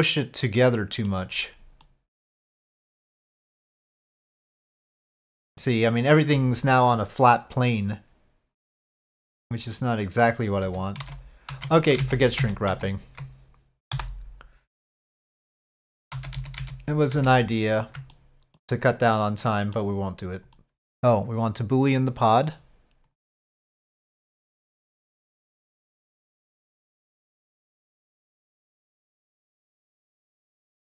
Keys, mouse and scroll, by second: 1.8 middle click, 3.6-6.3 middle drag, 10.6 ctrl+z, 11.1 ctrl+z, 11.5 ctrl+z, 12.0 ctrl+z, 12.4 ctrl+z, 12.7 ctrl+z, 15.0 middle click, 16.1 ctrl+z, 16.3 ctrl+z, 16.6 ctrl+z, 17.1 ctrl+z, 18.1-18.6 middle drag, 19.1-19.7 middle drag, 20.1 click, 23.0-24.4 drag, 25.1-26.9 drag, 27.6 middle click, 30.3 click.